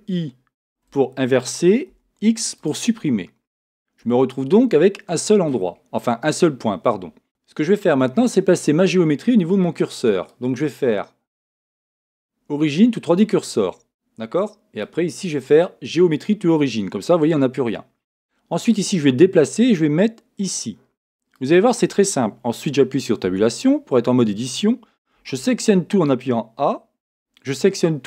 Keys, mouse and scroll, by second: 0.6 ctrl+i, 1.9 x, 4.0 Tab, 10.3-12.0 drag, 14.8-16.5 drag, 18.7-20.4 drag, 20.6 click, 23.2 Tab, 25.2 a.